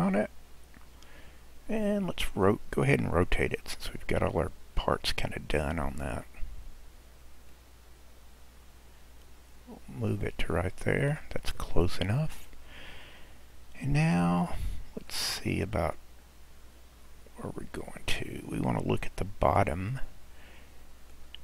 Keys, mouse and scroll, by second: 0.1-0.8 scroll down 2, 3.1 r, 7.5 click, 11.8 scroll, 12.6-14.3 scroll up 6, 14.3 scroll down 1, 15.2-16.2 middle drag, 16.2-17.7 scroll down 3, 17.7 scroll down 1, 17.9 click, 20.0-21.4 middle drag.